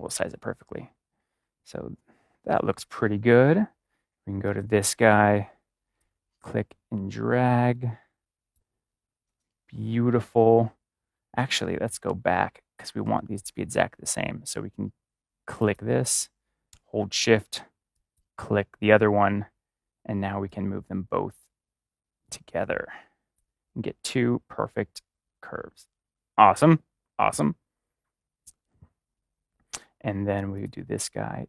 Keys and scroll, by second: 11.5 ctrl+z, 12.9 ctrl+z.